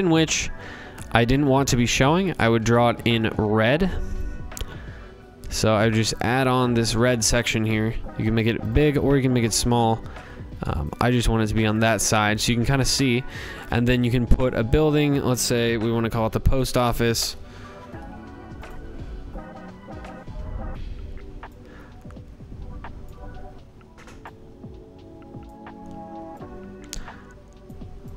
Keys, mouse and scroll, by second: 1.9-4.8 drag, 5.9 click, 7.7 click, 9.7 click, 10.7 click, 12.0 click, 12.7 click, 13.2 typing, 13.8 click, 14.9-16.7 typing, 17.6 click, 22.0 click, 24.4 click, 26.6 click, 27.8 click.